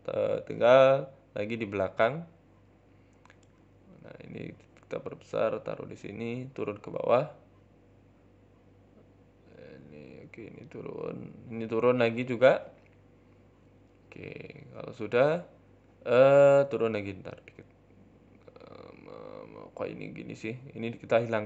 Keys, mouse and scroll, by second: 0.7-1.2 scroll down 4, 1.0 shift+middle click, 1.3-1.9 scroll up 2, 3.7 shift+d, 4.3 g, 6.1 KP_1, 6.8 middle click, 7.1-7.8 scroll up 2, 7.4 z, 8.1 click, 8.7 g, 9.9 click, 10.5 click, 11.9 g, 14.9-15.4 scroll down 4, 15.1 shift+middle click, 15.4 scroll up 5, 16.0 g, 16.8 scroll down 1, 17.0 middle click, 17.3 scroll up 1, 17.7 a, 17.9 a, 18.2 click, 18.7 scroll up 2, 18.9 shift+middle click, 19.9 l, 20.1 l, 20.6 Delete, 21.1 scroll down 5, 21.1 Tab, 21.3 middle click.